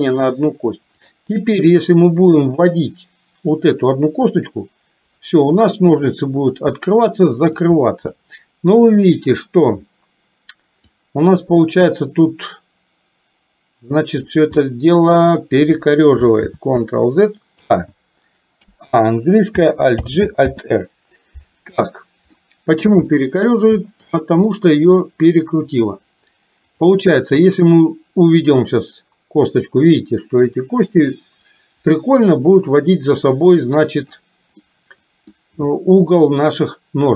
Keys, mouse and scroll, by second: 1.2 click, 3.7-6.6 drag, 6.8 middle click, 8.3 middle click, 11.1-14.3 drag, 14.7 middle click, 16.4 ctrl+z, 17.6 z, 18.7 a, 20.1 alt+g, 20.6 alt+r, 22.4 middle click, 23.2 shift+middle click, 24.2 middle click, 27.7-34.3 drag, 34.7 middle click.